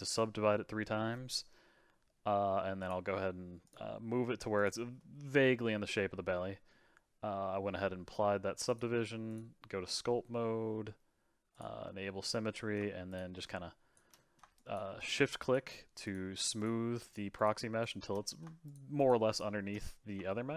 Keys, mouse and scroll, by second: 2.8 click, 3.6-5.0 drag, 5.0-8.0 middle drag, 8.6-11.6 drag, 12.2 middle click, 13.1-14.1 shift+drag, 14.1 middle click, 14.5-18.2 shift+drag, 18.2 middle click, 18.6-19.7 shift+drag, 19.7 middle click.